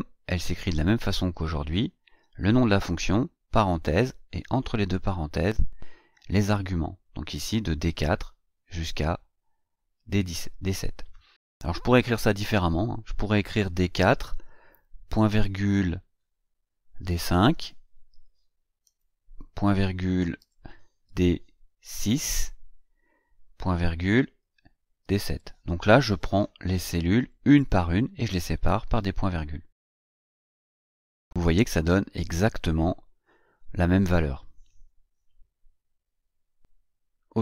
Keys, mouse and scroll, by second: 11.8 click, 13.6 BackSpace, 18.1 shift+d, 21.0 shift+d, 21.9 shift+KP_6, 30.4 Return.